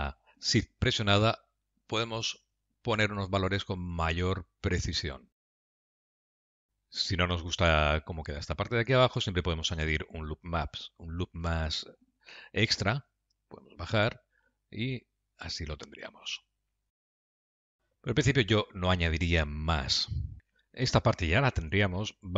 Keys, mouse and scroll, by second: 5.8 middle click, 12.8 ctrl+r, 17.4 middle click, 20.4 click, 20.9 Tab.